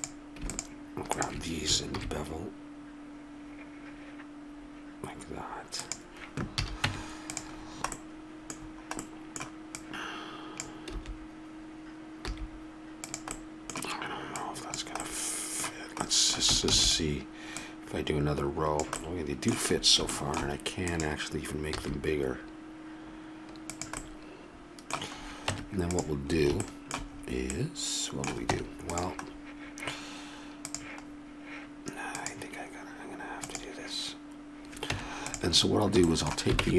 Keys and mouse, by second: 1.1-2.4 drag, 1.9 ctrl+b, 6.6 a, 6.9 Tab, 7.6 middle click, 9.7-11.0 middle drag, 11.0 d, 12.3 s, 13.3 click, 14.4-16.7 drag, 16.7 shift+d, 17.5-19.8 drag, 20.9 click, 21.8 s, 22.4 click, 22.7-24.0 middle drag, 25.5 Tab, 28.5 Tab, 30.7 click, 32.1-35.0 drag, 35.0 Tab, 36.6 ctrl+Tab.